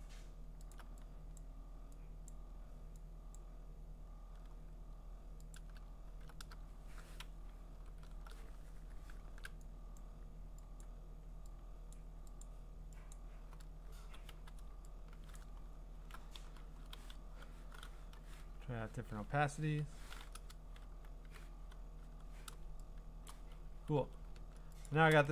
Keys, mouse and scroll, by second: 0.7 alt+click, 1.4 click, 2.3 click, 3.4 click, 5.6 alt+click, 6.0 scroll, 7.7 alt+shift+n, 9.2 !, 10.0 click, 10.8 click, 11.9 click, 12.4 click, 13.1 click, 13.8-14.8 typing, 15.4 click, 15.6-16.1 scroll, 16.8-22.1 typing, 19.1 middle click, 23.3 click, 23.9 v, 24.9 ctrl+click.